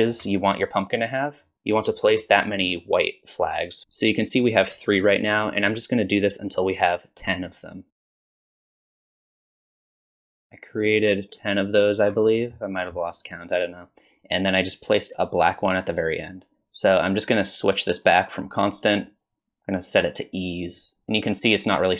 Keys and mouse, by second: 1.5 shift+click, 7.9-9.7 shift+drag, 11.2 shift+click, 18.5-20.7 drag.